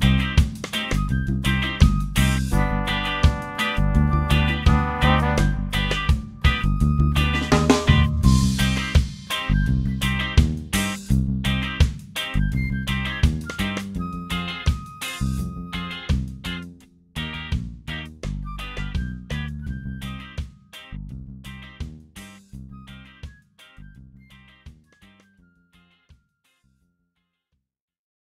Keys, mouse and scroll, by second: 1.4 click, 3.1 click, 3.9-5.9 drag, 7.5 click, 8.6 click, 11.3-13.2 ctrl+shift+drag, 13.5-13.9 ctrl+shift+scroll down 3, 14.0-14.7 scroll up 4, 16.5-19.0 drag, 19.9-20.9 middle drag, 21.5 click, 25.9 click, 28.1 click.